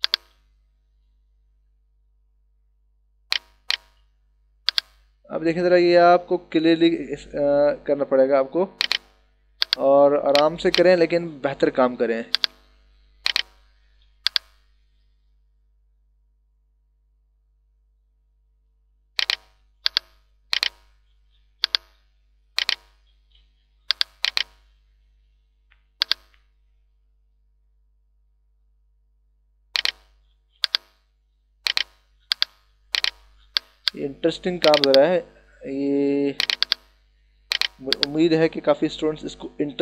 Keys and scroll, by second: 11.8 ].